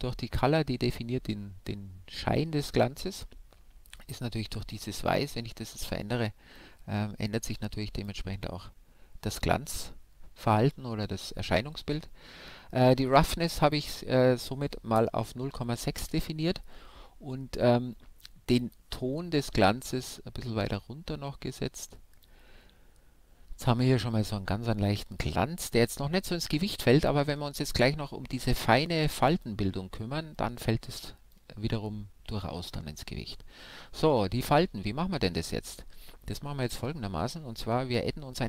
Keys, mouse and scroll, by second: 4.6-6.5 drag, 13.9-15.8 drag, 18.6-20.4 drag, 28.4-32.6 drag, 32.6-34.9 middle drag, 37.5-38.4 middle drag.